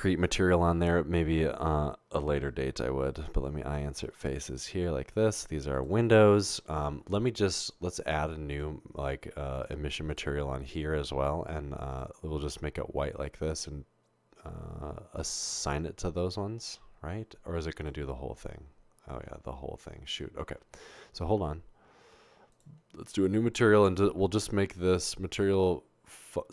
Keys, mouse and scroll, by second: 3.0 i, 8.5 click, 10.1 click, 15.6 click, 23.5 click, 24.8 click.